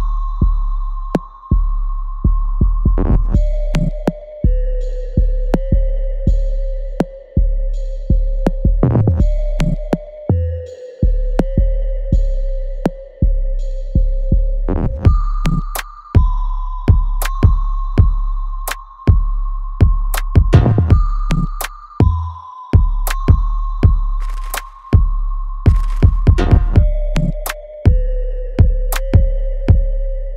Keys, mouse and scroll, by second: 2.1 alt+right click, 3.2 r, 4.0-7.5 drag, 7.5 right click, 8.1 click, 8.4 alt+right click, 8.8-10.5 alt+drag, 12.1 alt+right click, 12.6-15.8 alt+drag, 15.8 alt+middle click, 16.1 alt+right click, 16.6 alt+click, 18.1-21.1 alt+drag, 22.7 click, 23.0 alt+middle click, 23.4 alt+right click, 23.9-25.9 alt+drag, 25.9-28.5 alt+right drag, 28.5 click.